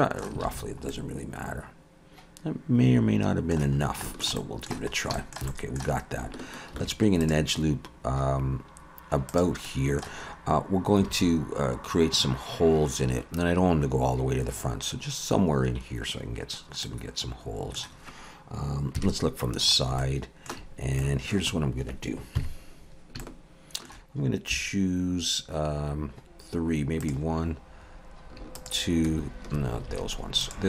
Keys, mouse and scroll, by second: 0.5 alt+a, 0.6-0.9 scroll down 3, 0.9 middle click, 3.8 scroll down 3, 4.0 shift+middle click, 4.4 middle click, 4.9 scroll up 2, 5.1 shift+middle click, 5.5 middle click, 6.7 ctrl+r, 9.6 middle click, 10.2-11.0 scroll up 2, 11.1 alt+a, 13.0-13.3 scroll down 2, 16.8 middle click, 19.0 KP_3, 19.7 scroll up 2, 20.0 shift+middle click, 20.8 scroll up 1, 21.0 middle click, 22.4 KP_3, 23.2 shift+middle click, 24.5 3, 27.0 click, 28.6 shift+click, 29.9 alt+a, 30.4 click.